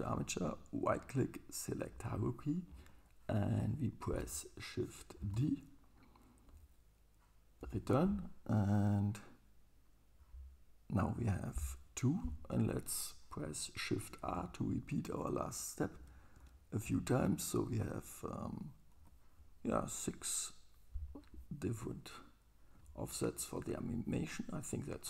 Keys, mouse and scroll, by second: 0.6-6.8 right drag, 5.2 shift+d, 14.3 shift+r, 16.0 shift+r, 16.4 shift+r, 16.9 shift+r, 21.8 super+right click.